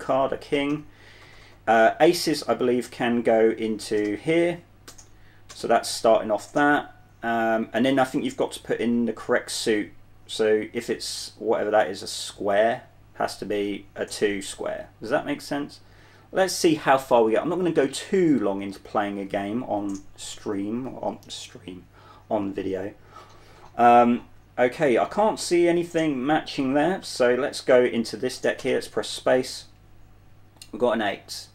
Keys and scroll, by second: 0.8-3.0 typing, 4.3-6.0 typing, 7.3-9.2 typing, 15.4 j, 16.5-17.8 typing, 19.4-21.5 typing, 24.6 typing, 26.5-28.0 typing, 28.9 Return.